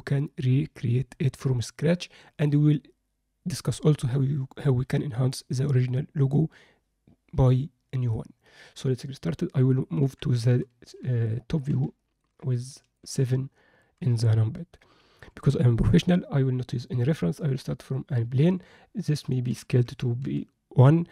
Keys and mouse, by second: 10.0 KP_7, 11.3-11.6 alt+shift+middle drag, 12.0 ctrl+alt+middle click, 12.7 shift+middle click, 13.5 ctrl+middle click, 15.3 shift+a, 19.5 s.